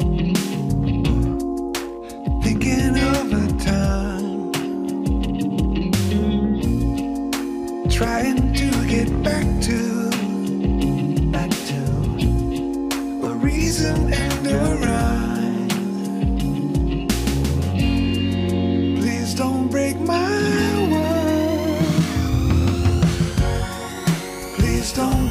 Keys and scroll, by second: 2.9 alt+Return, 4.4 Return, 9.5 Tab, 11.2 Tab, 11.8 Tab, 14.9 Tab, 19.0 Return, 20.8 Return.